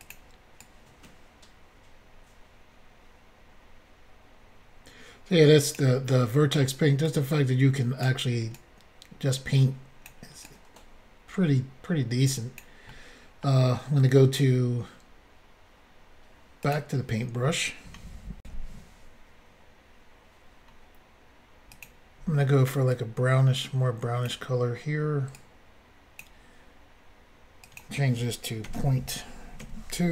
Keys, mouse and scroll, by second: 0.0 click, 0.1 click, 0.6 click, 6.1 middle click, 7.0 click, 8.6 click, 10.5 click, 12.9 middle click, 16.6 click, 16.7 click, 18.4 Insert, 21.7 click, 21.8 click, 22.9 click, 25.4 click, 27.7 click, 27.8 click, 28.7 ., 29.6 2.